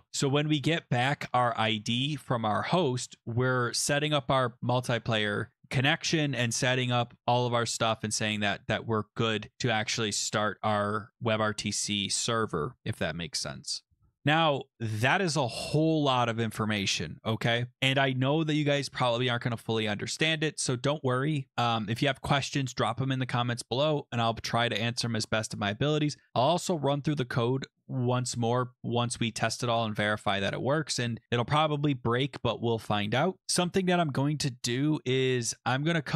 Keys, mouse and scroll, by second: 0.1-1.0 scroll, 2.4 click, 8.0 click, 13.8 scroll down 7, 13.9-14.8 scroll down 9, 14.8-15.2 scroll down 4, 15.2 scroll, 16.6 scroll, 18.7 click, 19.9 scroll, 24.6 scroll, 27.2-27.9 scroll, 29.9-31.2 scroll, 35.4-36.1 scroll.